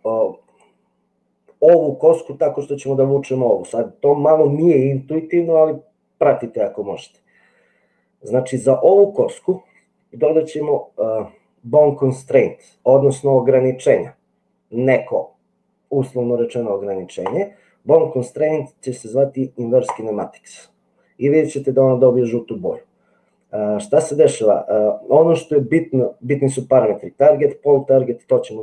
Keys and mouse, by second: 17.4-20.1 drag.